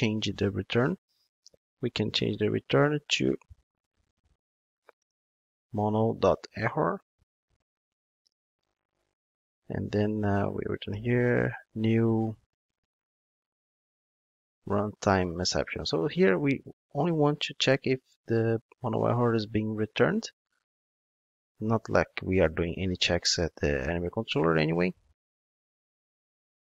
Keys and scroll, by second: 6.9 Return, 15.4 Return, 25.2 ctrl+Tab.